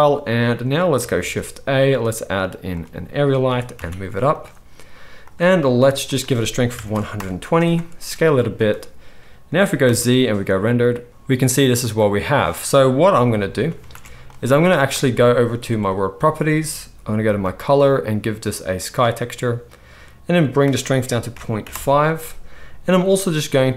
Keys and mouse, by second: 1.1 shift+a, 2.7-3.4 drag, 2.7-4.3 middle drag, 2.7-3.4 right drag, 3.4 g, 4.3-6.0 drag, 6.0-8.6 middle drag, 7.9 s, 8.6-15.8 drag, 9.8 z, 13.8 ctrl+b, 15.8 middle click, 16.0-16.9 drag, 16.9 right click.